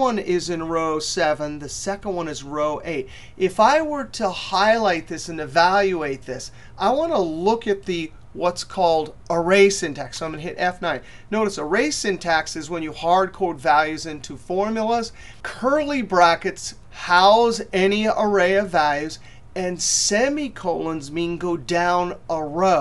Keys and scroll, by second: 9.5 F9.